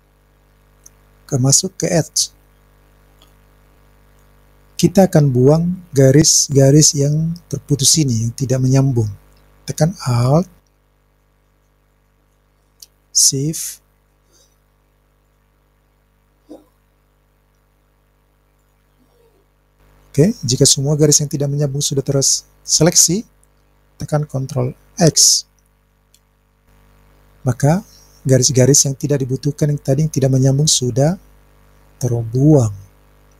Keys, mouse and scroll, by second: 3.7 click, 11.9 alt+click, 14.2 alt+click, 25.0 ctrl+x.